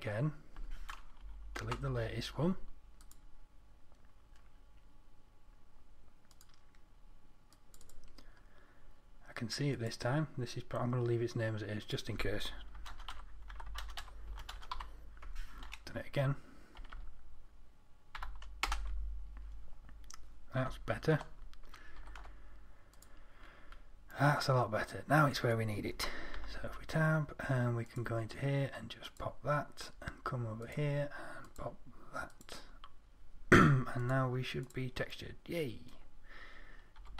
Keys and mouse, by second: 1.5 Delete, 3.3-4.7 drag, 17.2 Right, 22.3 ctrl+a, 26.6 Tab, 35.5 middle click.